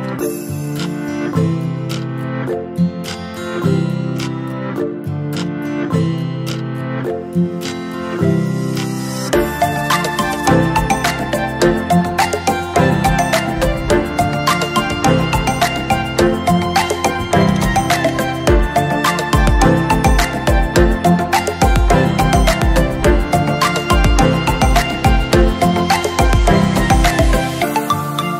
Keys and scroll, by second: 2.1 ctrl+shift+j, 13.0 ctrl+shift+j.